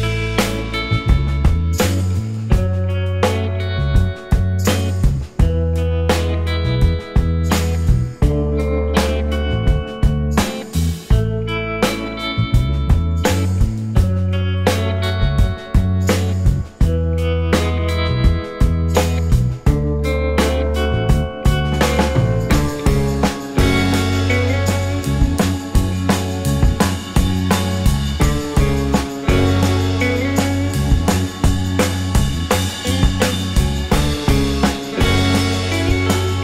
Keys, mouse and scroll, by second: 1.2 typing, 3.5 alt+click, 4.2 alt+middle click, 5.4 w, 6.9 w, 7.4 alt+click, 10.8 scroll, 10.9 scroll down 1, 11.3 alt+click, 14.4 alt+scroll up 2, 14.7 alt+click, 15.4 alt+scroll up 2, 15.9 alt+middle click, 16.2-16.5 alt+scroll up 1, 16.5 alt+click, 18.1 scroll, 18.3 scroll down 1, 18.7 alt+middle click, 20.2-21.0 scroll up 1, 21.0 scroll down 1, 21.2 alt+click, 24.4 alt+middle click, 24.6 alt+scroll up 2, 25.7 space, 26.4 space, 27.4-28.0 scroll down 1, 28.0 scroll up 1, 28.6 alt+middle click, 30.8 alt+middle click, 32.6 alt+middle click, 33.0 alt+scroll down 1, 33.2 alt+middle click, 33.7 scroll up 1, 35.9 space.